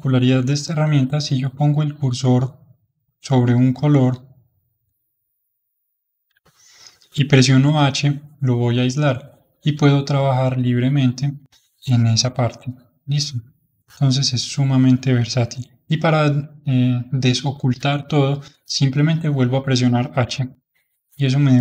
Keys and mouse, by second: 2.3-4.0 middle drag, 4.0 ctrl+click, 4.9-7.7 middle drag, 7.7 h, 10.5-14.1 drag, 20.2 h, 20.8-21.6 middle drag.